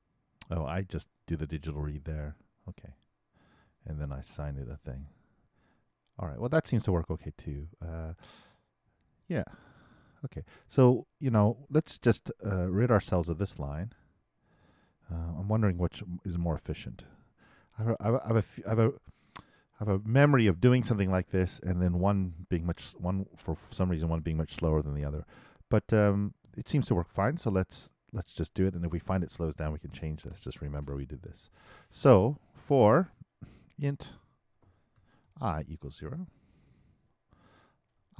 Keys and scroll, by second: 34.2 shift+9, 34.5 shift+|.